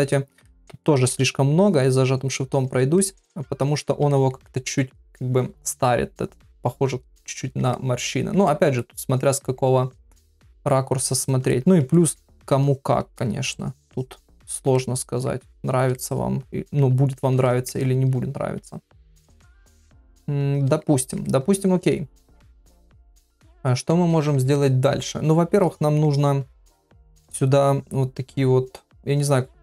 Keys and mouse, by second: 0.5 ctrl+middle click, 1.6 shift+click, 2.3 shift+click, 2.5 shift+click, 3.0 middle click, 3.7 click, 4.1 ctrl+middle click, 4.5 middle click, 5.0 ctrl+middle click, 6.4 middle click, 7.4 ctrl+middle click, 7.7 middle click, 8.5 ctrl+middle click, 8.8 middle click, 11.5 middle click, 11.9 ctrl+middle click, 12.6 shift+click, 13.2-14.6 shift+middle drag, 13.9 shift+click, 14.8 middle click, 15.9 middle click, 17.5 shift+middle click, 17.8-20.7 middle drag, 21.0 ctrl+middle click, 21.3 middle click, 23.9 ctrl+middle click, 24.6 shift+middle click, 25.6 middle click.